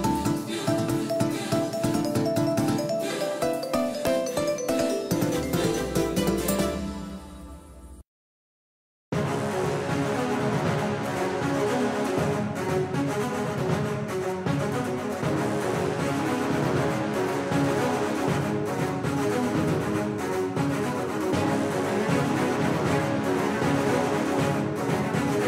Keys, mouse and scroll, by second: 1.1-3.4 right drag, 5.6-8.4 right drag, 6.7-9.1 drag, 9.4-13.7 middle drag, 12.0-15.9 right drag, 13.9-16.0 drag, 17.6-19.0 right drag, 18.7 click, 20.5 click, 21.5 right click, 24.6 right click.